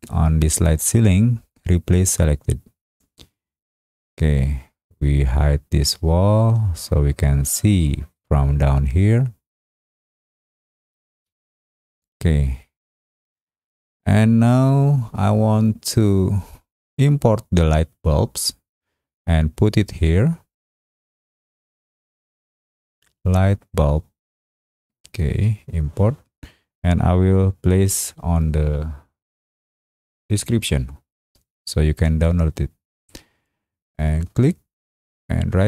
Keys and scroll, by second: 11.1 space.